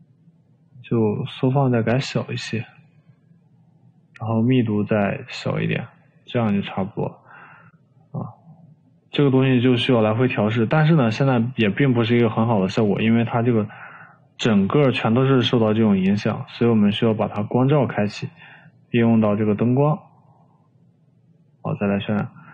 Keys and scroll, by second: 1.3 3, 4.3 3.